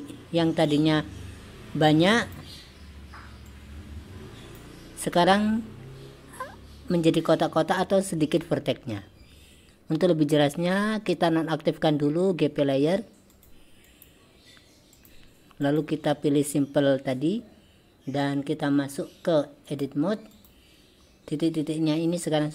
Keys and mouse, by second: 0.8-2.4 drag, 3.7-4.7 drag, 13.4 click, 13.9 click, 15.0 click, 15.7 click, 19.7-20.5 drag.